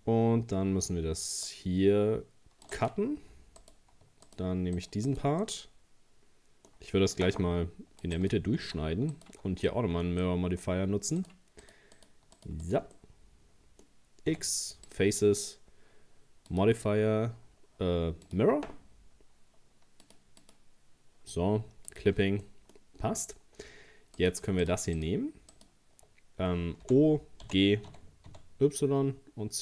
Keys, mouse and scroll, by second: 0.7 ctrl+r, 3.6 right click, 4.3 shift+right click, 4.8 shift+right click, 5.1 shift+right click, 5.4-7.5 middle drag, 7.5 ctrl+r, 9.1 alt+shift+right click, 9.7-11.2 shift+middle drag, 11.2 shift+right click, 11.6 shift+right click, 12.0 shift+right click, 12.4 shift+right click, 12.7 shift+right click, 13.0-14.3 middle drag, 14.3 x, 16.5-22.5 drag, 22.5 middle click, 22.9-23.3 scroll up 2, 23.5 scroll down 1, 24.2 right click, 24.6 shift+right click, 25.0 shift+right click, 25.5 shift+right click, 26.5-26.9 scroll down 1, 26.9 o, 27.5 g.